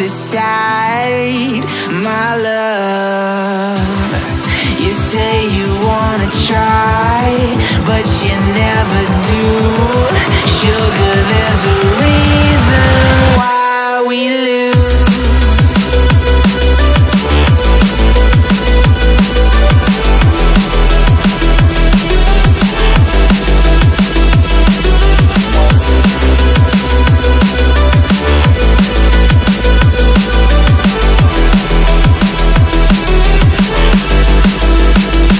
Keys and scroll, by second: 0.5 super+space, 1.0 alt+super+space, 1.1 alt+super+space, 1.2 alt+super+space, 1.3 alt+super+space, 1.4 alt+super+space, 1.5 alt+super+space, 1.6 alt+super+space, 2.3-2.8 alt+super+space, 3.4 a, 9.4 v, 9.9-10.6 space, 11.1 Tab, 16.8-18.0 space, 28.6 Tab, 33.5-34.5 typing.